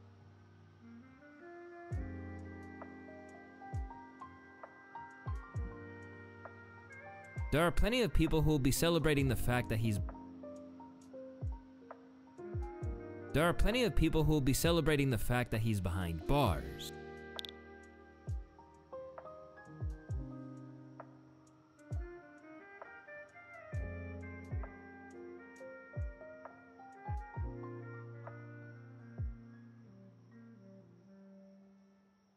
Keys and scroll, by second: 7.1 space, 9.6 space, 12.9 space, 16.4 space, 18.2 ctrl+d, 19.5 u, 22.3 u.